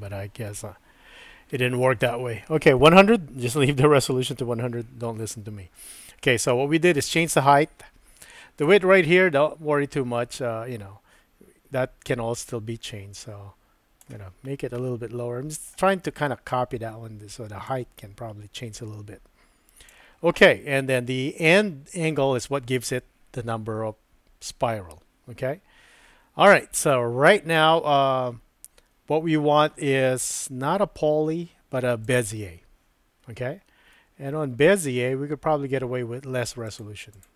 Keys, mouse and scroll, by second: 8.6-14.0 drag, 14.8 middle click, 17.6-19.9 drag, 32.0 click, 34.0 middle click, 36.6 click, 37.1 click.